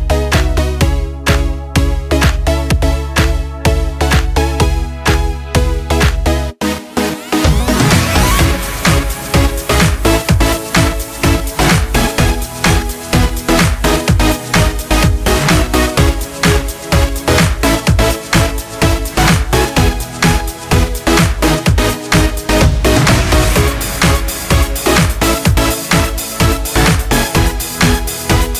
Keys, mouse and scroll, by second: 9.1-19.2 drag, 19.2 click, 19.3-25.9 drag, 25.9 right click, 27.3 click.